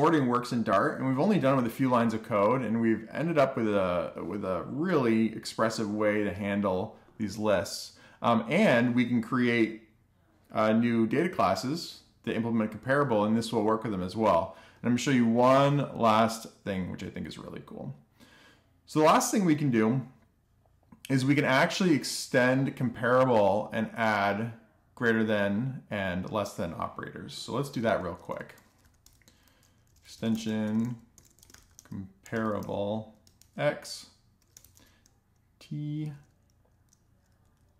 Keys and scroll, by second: 26.9 Return, 27.0 Return, 27.5-37.7 typing.